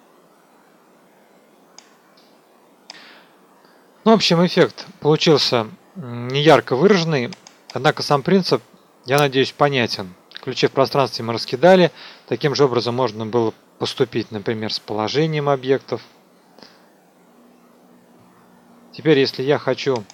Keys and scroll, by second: 3.9 KP_0.